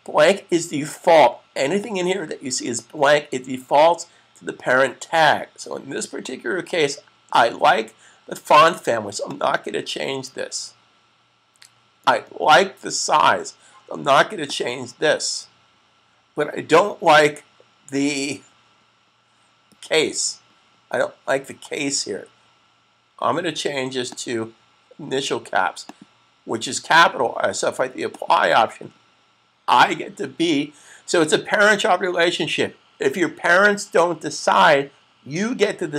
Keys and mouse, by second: 9.2 click, 14.3 click, 23.8 click.